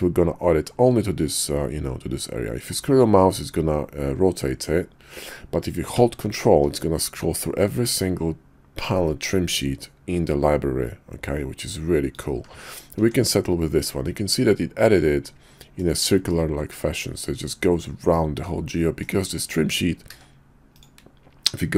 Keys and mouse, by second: 13.0 Tab, 14.0-15.7 middle drag, 16.3-19.0 middle drag, 20.7 d.